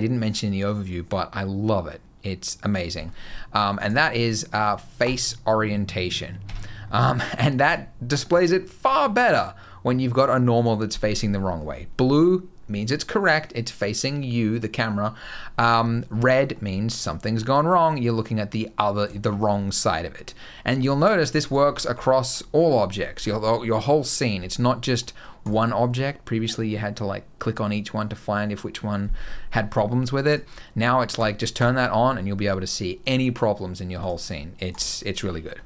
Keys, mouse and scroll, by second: 3.7 click, 6.3 Tab, 6.8 middle click, 11.2 middle click, 16.0 middle click, 16.5-17.2 scroll up 4, 17.2 middle click, 18.7 scroll down 2, 19.0 shift+middle click, 19.2-20.0 scroll up 2, 20.0-20.8 scroll down 4, 20.8 middle click, 21.3 click, 21.5-22.0 scroll down 6, 22.1 scroll up 3, 24.4-24.8 scroll up 2, 24.8 middle click, 25.3 click, 30.1 click, 33.8 click, 35.4 scroll up 2.